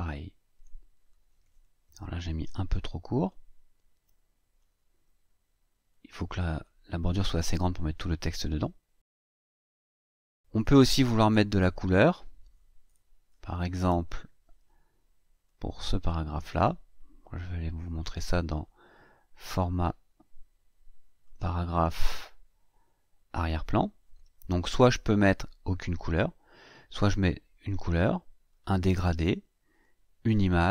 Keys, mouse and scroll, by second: 2.3-3.3 drag, 3.8-4.6 drag, 5.7-6.6 drag, 9.3 click, 15.3-16.5 drag, 19.2 click, 21.0 click, 23.2 click, 26.9 click, 28.3 click, 29.5 click.